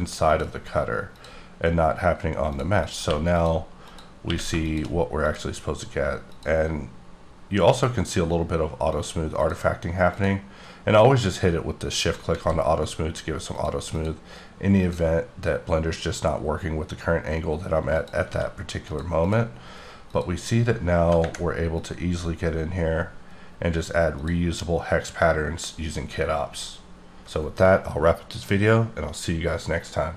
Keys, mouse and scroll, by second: 0.2 click, 1.1 click, 2.5 click, 2.7 click, 3.0 q, 3.3 click, 3.9 click, 4.3 q, 4.7 shift+click, 6.3 click, 7.2-8.9 scroll up 1, 8.9 click, 9.4 click, 10.1 click, 10.8-11.9 scroll down 2, 11.9 click, 12.3 s, 13.5 click, 13.9 click, 14.7 click, 15.7-16.4 scroll up 1, 18.0 click, 18.3 s, 18.9 click, 19.2 click, 20.0 click, 23.0-24.2 scroll down 4, 24.2 click.